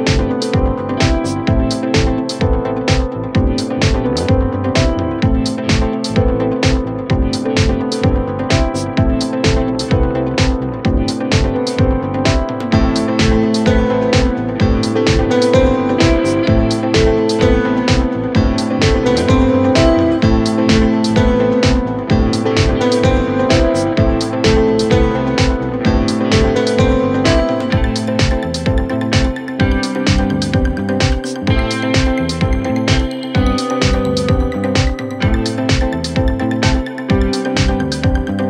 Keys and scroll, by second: 19.7 Return, 27.9-28.9 typing, 30.4 4, 33.3 ctrl+d, 33.8 ctrl+d, 34.3 ctrl+d, 34.7 ctrl+d, 35.0 ctrl+d, 35.4 ctrl+d, 35.7 ctrl+d, 36.0 ctrl+d, 36.3 ctrl+d, 36.6 ctrl+d, 36.9 ctrl+d, 37.1 ctrl+d, 37.8 ctrl+d, 38.0 ctrl+d, 38.2 ctrl+d.